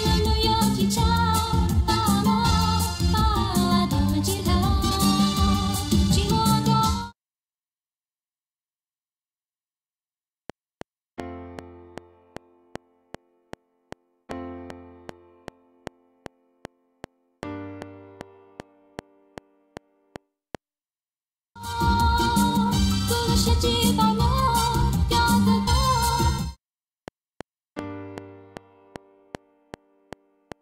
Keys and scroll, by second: 6.8 ctrl+space, 10.3 F7, 20.8 space, 21.9 Right, 26.2 space, 26.9 F7.